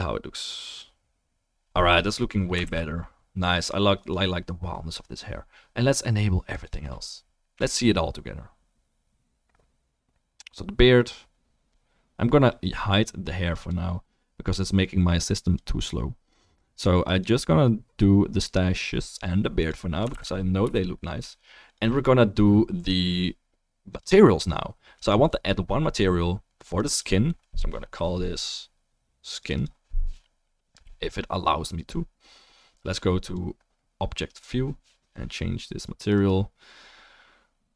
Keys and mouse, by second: 0.9-2.2 drag, 0.9-3.4 middle drag, 0.9-18.1 right drag, 3.4 ctrl+s, 4.0 click, 4.0 middle click, 11.1-12.7 drag, 11.1-12.7 middle drag, 14.6-16.4 drag, 14.6-18.1 middle drag, 19.6 click, 20.0-21.9 ctrl+right drag, 20.1 ctrl+s, 21.6 click, 21.9-24.9 drag, 28.0-28.7 middle drag, 30.3-31.3 middle drag, 31.6-35.0 right drag, 35.7 click, 37.2-37.7 drag.